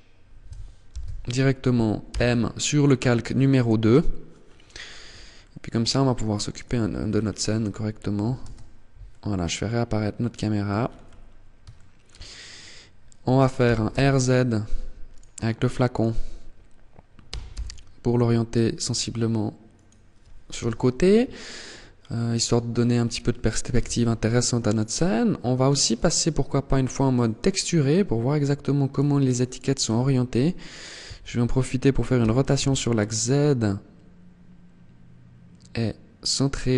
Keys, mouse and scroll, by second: 0.2 ctrl+z, 1.2 m, 4.0-4.5 scroll up 5, 4.5 middle click, 5.8 right click, 6.2-6.6 scroll down 6, 7.5 alt+h, 8.2 middle click, 10.0-10.3 scroll up 7, 10.8 shift+middle click, 12.8 r, 14.2 right click, 15.1 right click, 16.4 r, 19.0 click, 19.7 KP_0, 20.9 scroll down 2, 22.9 t, 23.8 right click, 25.0 click, 27.4-28.0 scroll up 1, 28.0 right click, 28.6 right click, 31.3 r.